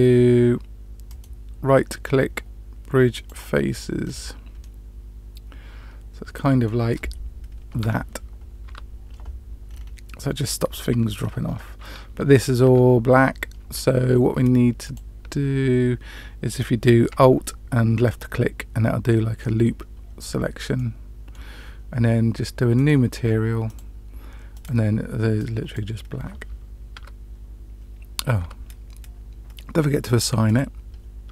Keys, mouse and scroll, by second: 1.0-3.3 right drag, 4.0 scroll up 1, 4.0-4.5 scroll down 2, 4.5-6.6 middle drag, 8.6 Tab, 9.6-10.0 scroll down 2, 11.7-12.6 scroll down 2, 12.6 Tab, 14.8 alt+click, 18.1-19.4 middle drag, 20.7 middle click, 22.7 click, 23.6 click, 24.5 click, 26.9 Tab, 28.4 Tab, 30.4 click, 31.2 Tab.